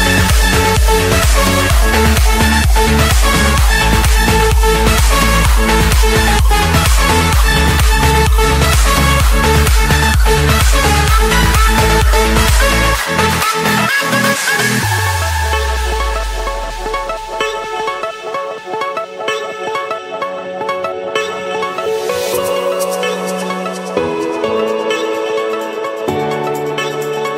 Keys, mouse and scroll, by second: 0.1-0.6 scroll, 1.7 click, 4.9 click, 6.4 click, 6.8 shift+click, 8.0-8.4 scroll, 9.1 scroll, 10.6-11.5 typing, 12.4 Return, 15.7-16.3 typing, 17.1 Return, 18.1 Escape, 20.0 click, 21.7 click, 21.9-22.6 scroll, 23.4 click, 24.1 click, 27.0 click.